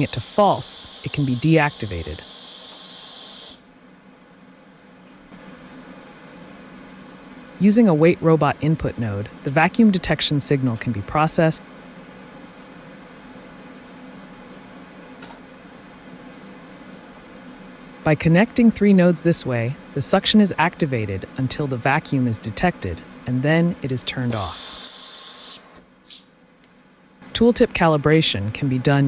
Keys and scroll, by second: 0.3 KP_0, 0.6 KP_Enter, 2.2 t, 5.3 i, 9.4 typing, 10.5-11.2 typing, 14.2 Home, 14.5 1, 15.2 Return, 24.1 t.